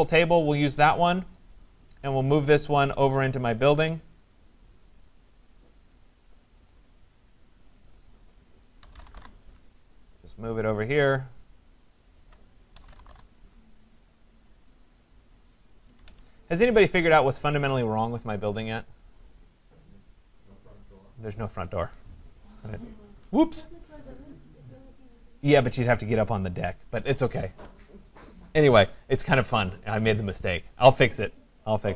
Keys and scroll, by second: 9.1 Return, 15.8 Escape.